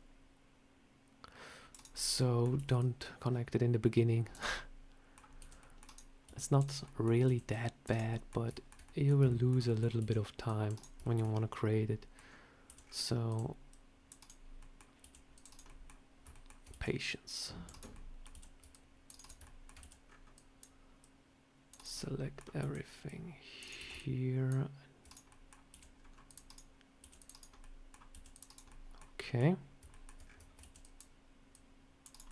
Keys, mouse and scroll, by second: 1.8 middle click, 2.5 c, 4.4 middle click, 5.3 c, 6.1 c, 6.7 middle click, 7.1 c, 8.0 middle click, 8.4 shift+middle click, 8.7 middle click, 9.2 shift+middle click, 9.5 middle click, 9.9 c, 10.9 shift+middle click, 11.2 scroll down 4, 11.4 middle click, 12.2 scroll up 1, 12.6 c, 14.5 middle click, 14.9 c, 15.6 middle click, 16.2 shift+middle click, 16.6 c, 17.8 middle click, 18.2 c, 19.1 shift+right click, 19.3 middle click, 19.7 c, 21.9 middle click, 22.5 c, 23.7 c, 25.2 middle click, 25.6 c, 26.9 c, 27.5 middle click, 28.0 c, 28.6 middle click, 29.1 middle click, 29.8 shift+middle click, 29.8 shift+middle click, 30.1 scroll up 3, 30.5 c, 32.2 middle click.